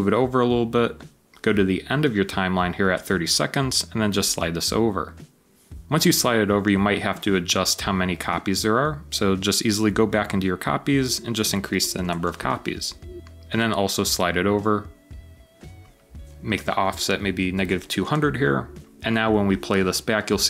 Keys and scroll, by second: 0.8 typing, 2.2 typing.